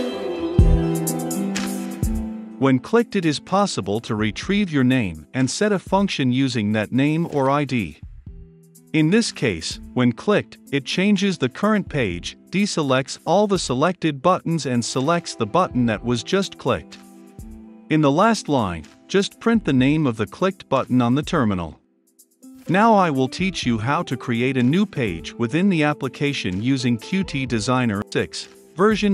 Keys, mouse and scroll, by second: 6.3-28.0 drag.